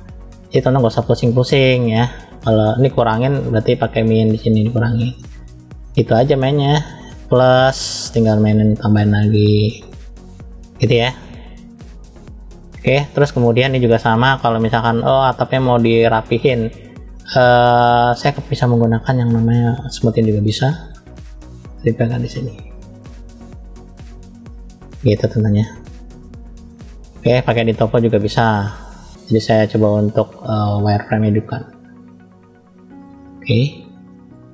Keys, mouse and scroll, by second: 1.3 middle click, 2.9 click, 3.8 click, 5.0-6.0 middle drag, 6.3 middle click, 7.4 click, 8.1 click, 9.7-11.5 middle drag, 11.8 middle click, 13.4 shift+middle click, 14.1-14.7 scroll up 1, 14.7 middle click, 19.6 click, 20.3 middle click, 21.2 click, 23.0 click, 24.4 middle click, 25.8 middle click, 27.1-28.3 drag, 30.6-33.3 drag.